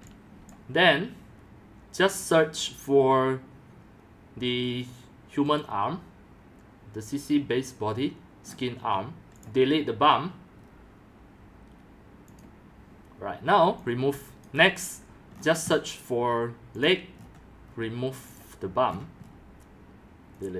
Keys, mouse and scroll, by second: 0.0 scroll, 0.5-8.3 drag, 8.4-9.1 scroll down 8, 9.4-10.3 drag, 10.5 click, 10.6 scroll up 1, 10.6 scroll down 3, 10.9-11.3 drag, 12.3-13.7 drag, 13.7-14.7 typing, 14.5 click, 15.3-17.8 scroll down 17, 16.8-17.2 drag, 18.0 middle click, 18.0 scroll, 18.2 middle click, 18.3 click, 18.9 scroll, 19.2 middle click, 19.2 scroll down 8, 20.4 click.